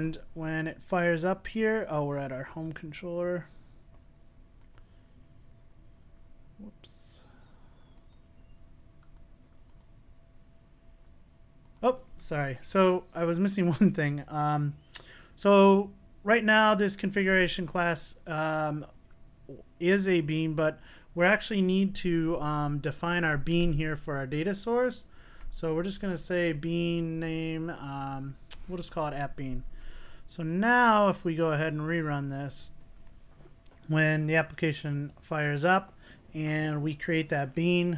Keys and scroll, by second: 4.8 alt+super+r, 5.7 alt+super+r, 29.9 super+s, 31.9 super+r.